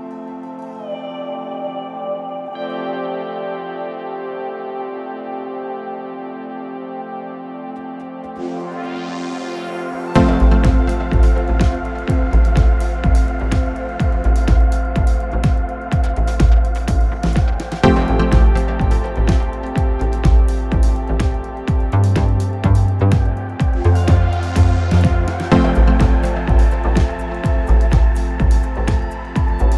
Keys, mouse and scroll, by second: 4.1 KP_7, 6.0 click, 7.4-10.5 drag, 14.9 shift+d, 16.1-19.2 drag, 19.4 click, 20.6 click, 21.8 shift+click, 24.0 shift+d, 25.3-25.7 drag, 27.1-29.7 drag.